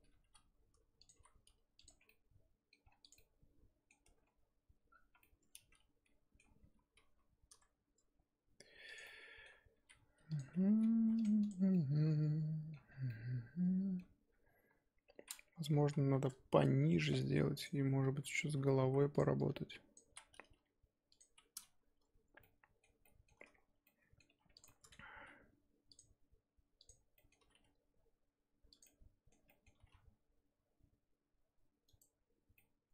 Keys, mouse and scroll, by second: 0.2 g, 1.1 r, 1.9 Tab, 2.1 middle click, 2.9 scroll down 1, 3.0 click, 3.1 middle click, 4.0 scroll up 1, 4.0 Tab, 4.9-5.2 scroll up 2, 5.2-6.5 middle drag, 6.5 g, 9.0 middle click, 9.7 r, 10.6 g, 11.2 Tab, 11.4 click, 11.6 scroll down 1, 11.7-12.8 middle drag, 12.8 scroll down 4, 13.1-14.2 middle drag, 14.2-14.9 scroll up 3, 14.9-15.7 scroll up 2, 15.8 KP_1, 16.8-17.5 scroll up 3, 17.5 click, 17.7 scroll up 1, 17.8 Tab, 18.1 z, 18.8 z, 19.1 click, 19.3 click, 20.0 z, 20.5 g, 21.8 scroll up 2, 22.4-24.3 middle drag, 24.3 1, 24.5 click, 24.6 middle click, 25.1 g, 26.8 click, 27.1 middle click, 27.4 g, 28.8 middle click, 29.7 g, 32.5 middle click.